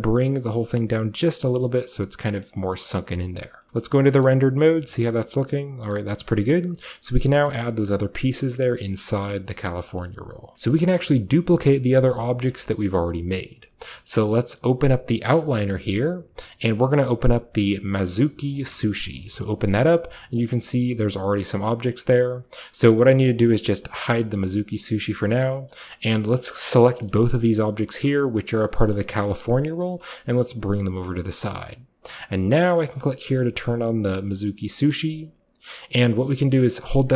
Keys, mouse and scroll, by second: 1.3-1.9 drag, 1.5 Tab, 1.6 scroll down 1, 1.9 a, 2.3 scroll down 1, 2.9-4.1 middle drag, 3.0 a, 3.4 scroll down 1, 3.8 scroll up 1, 4.1 typing, 4.3-5.1 middle drag, 4.6 scroll down 1, 6.0-7.2 middle drag, 6.1-7.2 scroll up 1, 7.3 middle click, 7.5-8.4 shift+middle drag, 7.5-8.4 shift+scroll up 1, 8.6 middle click, 8.9 typing, 9.3 shift+middle click, 9.5 shift+middle drag, 9.9 shift+middle click, 10.1-10.8 shift+middle drag, 10.5 Tab, 10.9-12.5 middle drag, 12.5-14.5 shift+scroll up 1, 12.7-14.5 shift+middle drag, 14.5 shift+scroll up 1, 14.5-17.3 drag, 15.4 typing, 18.6 click, 19.0-19.6 scroll down 1, 19.3-20.8 shift+middle drag, 19.6-20.6 shift+scroll up 1, 20.6 shift+scroll down 1, 20.7 shift+scroll up 1, 20.9 shift+middle click, 21.2-22.5 shift+middle drag, 22.7-24.7 middle drag, 24.7 click, 25.3-26.1 scroll up 2, 25.4-27.0 middle drag, 26.1-27.8 scroll up 2, 27.0 shift+right drag, 27.8-28.5 shift+scroll up 1, 28.5-28.9 shift+scroll up 1, 28.9-30.0 scroll down 3, 30.0 g, 30.2-31.4 middle drag, 31.4-34.4 drag, 35.0 shift+middle click, 35.2-36.8 scroll up 2, 36.8 scroll up 1, 36.9-37.1 right drag.